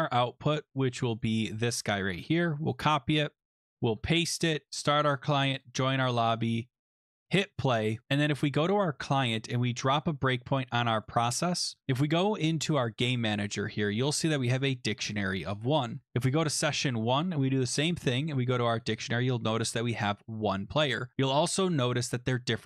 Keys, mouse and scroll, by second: 0.5 click, 1.2 click, 1.4 click, 2.1 ctrl+c, 2.7 click, 3.5 click, 3.7 click, 3.9 ctrl+v, 4.7 click, 5.6 click, 6.5 click, 6.9 click, 7.3 click, 8.4 click, 9.0-10.3 scroll, 11.0 click, 11.8-12.9 scroll, 12.9 click, 14.8 click, 16.5 click, 17.3-17.6 scroll, 17.8 middle click, 17.9 click, 19.0 click.